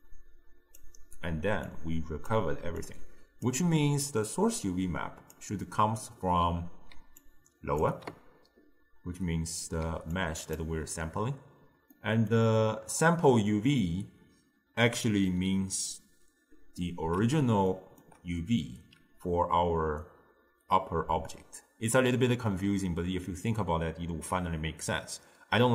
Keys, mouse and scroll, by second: 0.1 drag, 1.7 click, 2.8 click, 4.1 click, 5.7-7.1 middle drag, 7.1 d, 7.3 click, 7.9 d, 8.0 d, 9.9 d, 10.2-10.6 drag, 10.6 d, 10.7 d, 10.8 d, 12.0-15.1 middle drag, 16.8-20.9 middle drag.